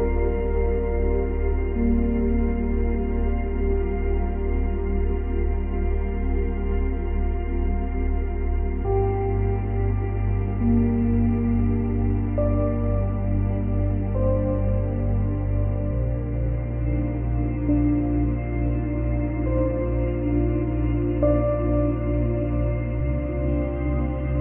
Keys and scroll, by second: 17.3 ctrl+c, 17.5 ctrl+v.